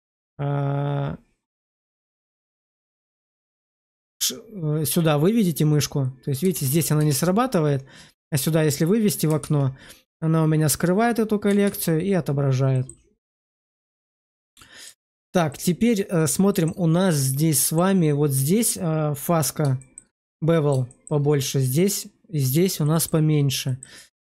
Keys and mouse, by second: 1.8 click, 2.5-3.2 drag, 3.4 shift+2, 6.4 shift+2, 7.0 shift+2, 9.3 shift+2, 11.5 shift+2, 12.6 middle click, 13.1 middle click, 13.5 shift+middle click, 13.9-14.7 middle drag, 14.9 shift+middle drag, 15.4-16.2 middle drag, 16.4 shift+middle click, 16.9 middle click, 19.7 shift+middle click, 20.1-20.6 middle drag, 20.8 shift+middle drag, 22.7 shift+middle drag, 23.5 shift+middle click.